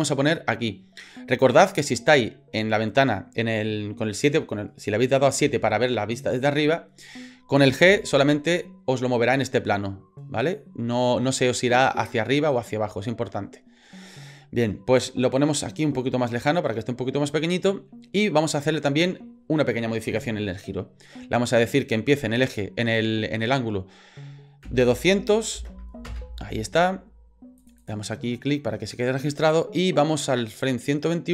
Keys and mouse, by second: 7.8 g, 21.9-26.7 drag, 27.6 click, 27.8 click, 29.2-30.9 drag.